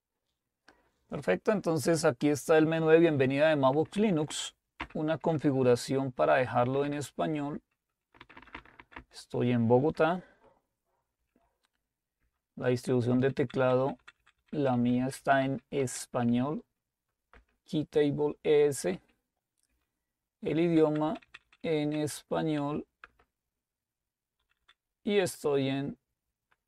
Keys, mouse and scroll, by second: 3.8 Up, 3.9 Up, 4.1 Up, 4.3 Up, 4.8 Down, 5.7 Return, 6.6 Down, 6.8-9.2 typing, 10.0 Return, 11.2-12.2 typing, 13.2-14.5 typing, 14.7 Down, 14.9 Down, 15.2 Down, 15.6 Down, 15.8 Down, 16.3 Up, 16.3 typing, 17.3 Return, 17.3 typing, 19.0 Up, 19.0-19.7 typing, 19.7 Return, 20.7 Down, 21.3-21.6 Down, 21.8 Down, 22.6 Up, 23.1 Return, 24.4 Down, 24.4 typing.